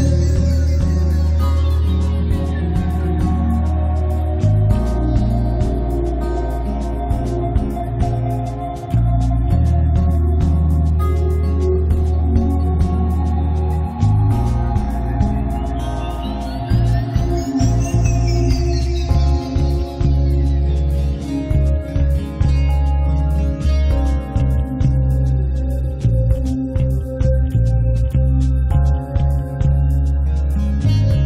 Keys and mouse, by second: 0.3 click, 0.9 middle click, 1.0 click, 2.2 click, 2.7 click, 3.9 click, 4.1 middle click, 5.1-8.5 middle drag, 8.7 click, 9.3 middle click, 9.5 right click, 10.3 middle click, 11.1 s, 12.6 click, 13.2 middle click, 13.5 s, 14.4 click, 14.6 middle click, 15.7 ctrl+z, 17.7 a, 18.5 right click, 18.8 ctrl+a, 20.2 middle click, 20.4 a, 20.8 click, 22.0-23.2 middle drag, 23.8 middle click, 24.1 click, 24.4-26.1 typing, 24.9 Tab, 25.9 Tab, 27.6-30.5 typing, 28.2 Tab, 29.5 Tab, 30.8 right click, 31.1 ctrl+a.